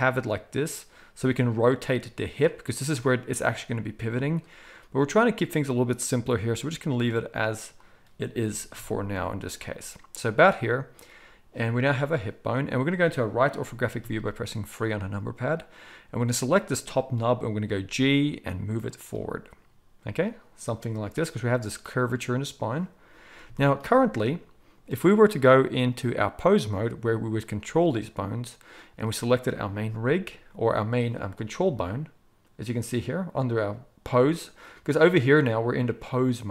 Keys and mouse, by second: 7.7-9.5 drag, 8.4 g, 9.5 middle click, 10.4 click, 10.5-15.5 middle drag, 14.0 KP_3, 15.5-19.0 drag, 17.6 g, 19.0-25.7 middle drag, 25.7-28.9 drag, 28.9-36.5 middle drag.